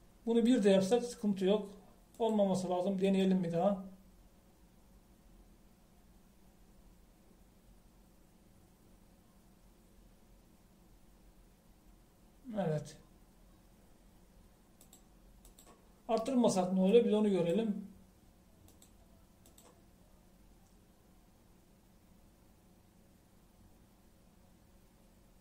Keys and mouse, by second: 16.0-21.5 drag.